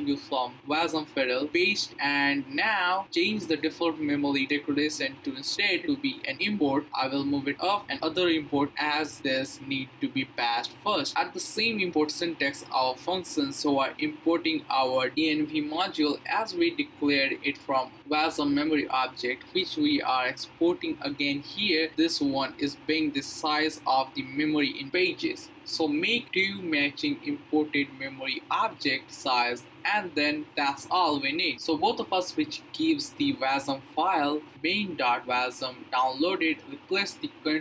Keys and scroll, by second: 1.3 super+v, 4.3 super+x, 4.9 BackSpace, 6.3 Return, 6.9 super+v, 8.6 BackSpace, 9.1 space, 10.3 (, 11.8 Right, 11.9 Right, 12.0 Right, 12.1 Right, 12.2 Right, 13.7-15.5 typing, 14.1 Left, 14.2 Left, 17.4 Left, 17.6 Left, 17.7 Left, 17.8 Left, 17.9 Left, 19.0-24.0 typing, 21.9 Left, 25.2-28.9 typing, 25.8 Left, 28.7 Right.